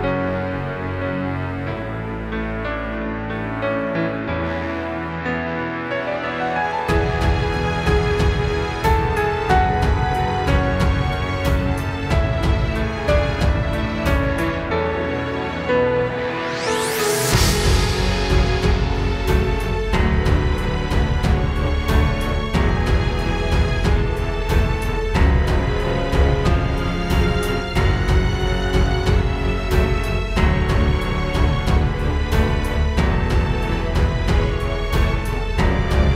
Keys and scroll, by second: 6.9 alt+super+space, 7.2 alt+super+space, 8.0 alt+super+space, 8.6 super+space, 8.8 super+space, 9.0 super+space, 18.2 space, 21.2 space, 21.7 space, 23.9 super+z, 24.8 super+[.